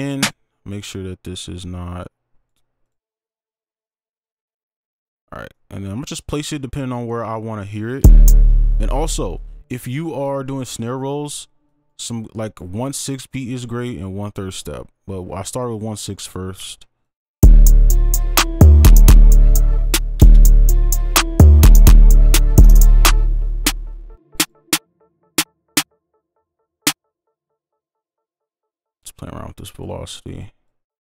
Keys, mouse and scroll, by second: 5.5 right click, 8.0 space, 8.4 space, 16.6 scroll up 1, 19.7 space, 21.8 space, 23.1 space, 24.7 double click, 28.1 ctrl+click.